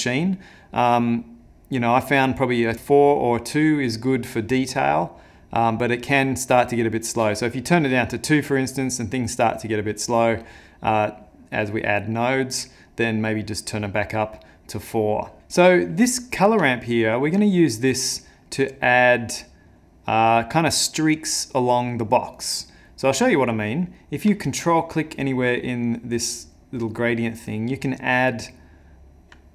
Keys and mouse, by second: 15.5 middle click, 16.3 middle click, 16.6 ctrl+middle click, 16.8 ctrl+middle click, 17.5 middle click, 25.6 ctrl+click.